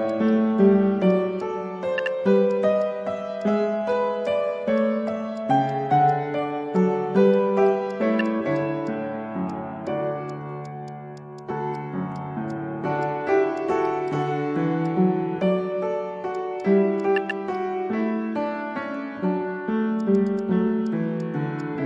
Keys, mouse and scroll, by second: 0.1 alt+click, 0.3 alt+click, 0.4 alt+middle click, 1.4 alt+click, 2.0 ctrl+z, 2.5 alt+click, 2.7 scroll down 1, 2.8 alt+click, 3.0-3.4 scroll up 1, 3.4 Tab, 3.9 Tab, 4.2 Tab, 6.1 alt+click, 6.7 Tab, 7.3 alt+click, 8.1 ctrl+z, 8.2 alt+click, 9.5 Tab, 10.3 alt+click, 11.7 Tab, 12.0 Tab, 12.5 alt+click, 13.0 Tab, 13.6 alt+click, 14.2 alt+click, 14.8 shift+click, 16.6 alt+click, 17.5 shift+click, 20.0 alt+click, 21.2 alt+click.